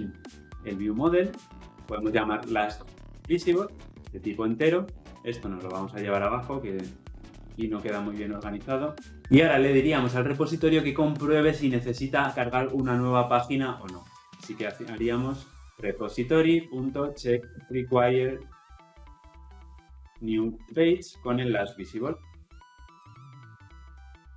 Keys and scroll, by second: 4.0 ctrl+z, 5.1 ctrl+z, 7.4 ctrl+x, 8.3 Delete, 14.2 Tab, 16.4 Return, 24.0 Return.